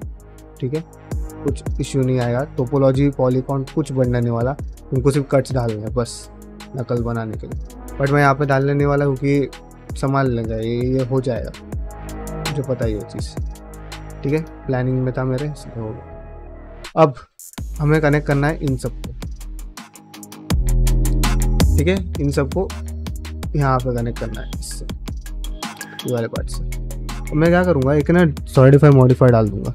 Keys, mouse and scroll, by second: 1.0-2.1 middle drag, 6.1-8.2 middle drag, 8.9-10.4 middle drag, 10.9 middle click, 11.3 ctrl+middle click, 11.6 middle click, 12.0 middle click, 12.4 ctrl+middle click, 12.7 ctrl+middle click, 12.9 middle click, 13.4 ctrl+middle click, 13.6 ctrl+middle click, 14.1 click, 14.4 ctrl+middle click, 15.0 ctrl+middle click, 15.3 middle click, 15.8 middle click, 16.3 shift+middle click, 16.6 middle click, 17.0 1, 17.3 middle click, 17.9 click, 18.7 ctrl+click, 19.0 middle click, 19.6 ctrl+click, 19.9 shift+middle click, 20.1-21.4 middle drag, 22.2 ctrl+middle click, 22.8 ctrl+middle click, 23.4 middle click, 24.5 ctrl+middle click, 25.0 middle click, 26.0 shift+middle click, 26.4-27.3 ctrl+middle drag, 27.3-29.2 drag.